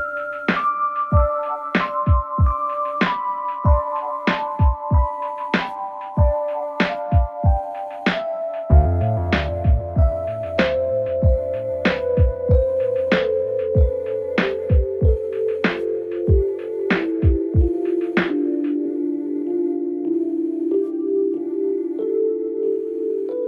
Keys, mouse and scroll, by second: 0.8-2.1 click, 5.8 space, 8.0 space, 9.2-11.4 click, 16.8-20.8 click.